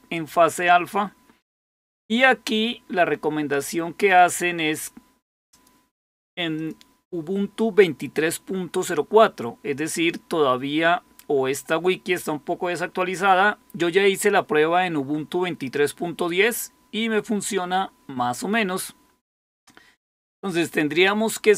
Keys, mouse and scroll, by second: 0.7-1.4 scroll down 1, 1.4-2.9 scroll down 1, 6.5 click.